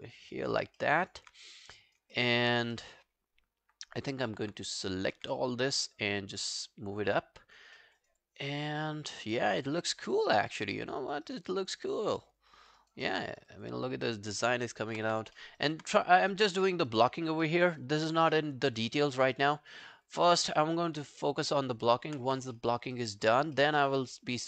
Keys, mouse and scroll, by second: 0.3 alt+middle click, 0.5 alt+right click, 0.8 alt+middle click, 1.0 alt+right click, 1.4 right click, 2.2 alt+middle click, 2.8 alt+middle click, 3.1-3.4 alt+scroll down 1, 4.3 alt+middle click, 5.2 w, 7.8 alt+middle click, 8.0 alt+right click, 8.2 alt+click, 9.7 alt+scroll down 5, 10.0 alt+click, 10.7 alt+scroll down 1, 10.9 alt+click, 11.3 alt+right click, 11.6 alt+click, 11.9 alt+right click, 12.1 alt+click, 12.8 alt+right click, 13.1 alt+middle click, 13.3 alt+right click, 13.5 alt+click, 14.4 alt+middle click, 14.6 alt+right click, 14.8 alt+click, 15.1 q, 15.4 alt+middle click, 15.6 alt+right click, 17.5 alt+middle click, 17.7 alt+right click, 18.4 alt+middle click, 18.8 alt+click, 19.1 alt+scroll down 1, 19.4 alt+click, 20.4 alt+middle click, 20.7 alt+right click, 20.9 alt+click, 21.5 alt+middle click, 21.6 alt+right click, 21.9 alt+click, 22.3 w, 22.6 alt+middle click, 22.8 alt+right click, 23.0 alt+click, 23.6 alt+middle click, 23.8 alt+right click, 24.4 alt+scroll down 1.